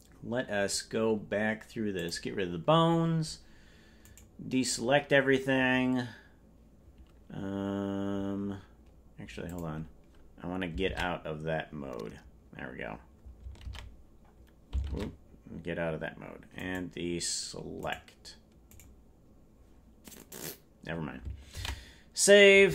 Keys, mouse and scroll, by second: 1.9 click, 9.4 click.